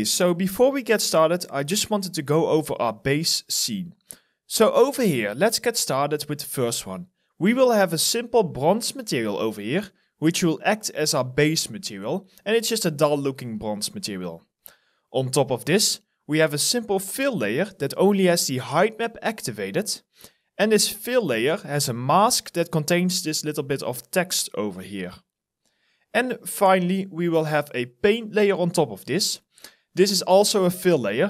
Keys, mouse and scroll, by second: 1.9 alt+right click, 2.4 alt+click, 12.6 alt+click, 20.0 alt+middle click, 20.4 alt+right click, 22.2 alt+middle click, 22.6 alt+right click, 25.4 alt+right click, 26.1 alt+middle click.